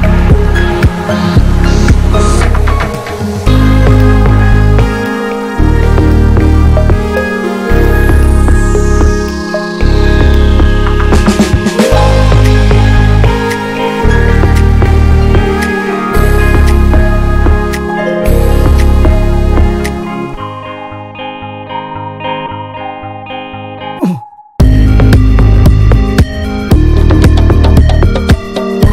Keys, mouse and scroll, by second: 2.8-3.4 scroll up 1, 3.4 middle click, 3.7 alt+z, 4.4 alt+z, 4.8 click, 5.4 middle click, 5.9-6.2 scroll down 1, 6.2-9.0 middle drag, 9.0-9.8 scroll up 1, 9.8 click, 10.6 shift+click, 10.9 shift+click, 11.2 shift+click, 11.7 shift+click, 11.9 shift+click, 12.2 shift+click, 12.7 right click, 13.2 a, 13.6 a, 13.8-15.3 right drag, 15.3 click, 15.4 click, 16.6 click, 17.1 click, 17.1 l, 17.5 l, 18.8 g, 20.9 click, 21.5 g, 23.2 s, 25.5 g, 27.2 s.